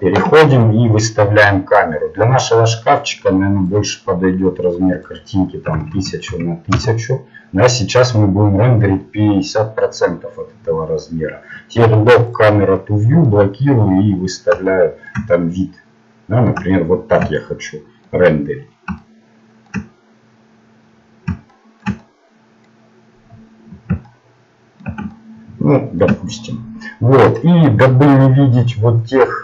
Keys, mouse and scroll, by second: 6.7 KP_0, 9.6-12.3 middle drag, 12.3-14.0 drag, 14.0-16.6 middle drag, 24.2-27.3 middle drag, 27.3-29.2 drag.